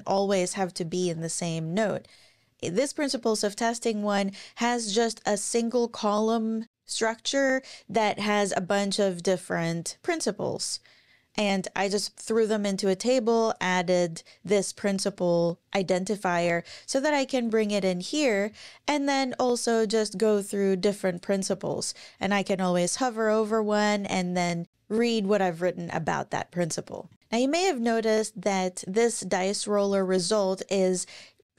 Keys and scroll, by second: 0.0-1.2 typing, 16.3 ctrl+shift+Tab, 18.1 super+e, 27.2 super+e.